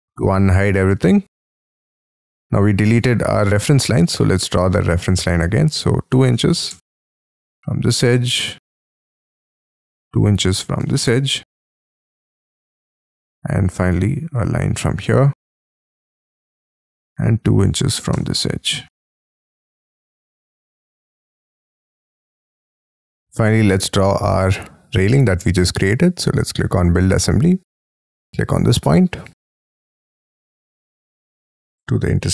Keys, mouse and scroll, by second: 0.9-2.1 scroll up 34, 3.2-3.6 scroll down 29, 3.6-6.1 scroll up 11, 4.1 t, 6.1 2, 6.5 shift+', 6.7 Return, 7.3-8.3 scroll down 26, 8.3-9.8 scroll up 18, 10.1-11.8 typing, 11.6 scroll down 10, 12.6 middle click, 13.1-13.6 scroll up 10, 13.6 scroll down 1, 13.7 scroll up 3, 14.7 scroll up 6, 16.0 shift+click, 16.2 space, 16.4 t, 17.4 2, 17.9 shift+', 18.2 Return, 18.5 space, 18.9 e, 19.7-20.7 scroll down 25, 20.7 middle click, 21.2 middle click, 21.5 shift+middle click, 21.9 shift+space, 22.1-22.8 scroll up 20, 22.8 middle click, 23.5 middle click, 28.8-30.8 scroll down 30, 30.8-32.3 scroll up 34.